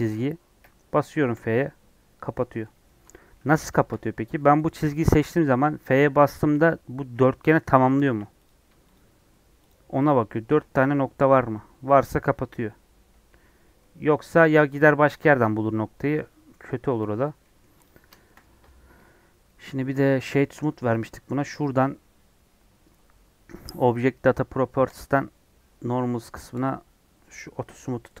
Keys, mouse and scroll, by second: 0.6-1.2 f, 2.3-4.6 middle drag, 4.6 click, 4.9-8.0 shift+middle drag, 8.0 1, 8.4 click, 9.6 shift+click, 13.8-15.2 middle drag, 15.2 click, 16.2 middle click, 16.6 2, 17.4 middle click, 17.8 click, 18.2 shift+middle click, 18.4 Tab, 26.5-28.2 drag.